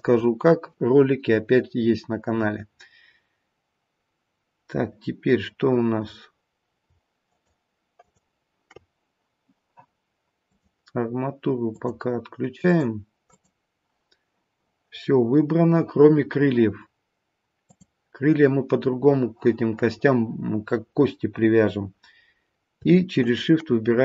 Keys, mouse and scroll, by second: 7.2 shift+click, 7.9 shift+click, 11.8 click, 12.6 click, 17.7 click, 23.2 shift+click.